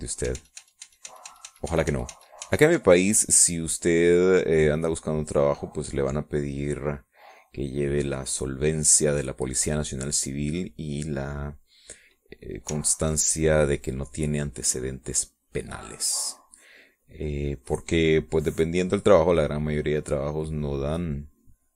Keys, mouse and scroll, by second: 1.4 ctrl+z, 4.4-7.2 drag, 7.5 middle click, 8.4 middle click, 9.2 middle click, 9.9 middle click, 11.1-12.2 middle drag, 12.3 middle click, 13.9 ctrl+click, 14.3-20.2 ctrl+drag, 20.2 click, 21.3-21.7 drag.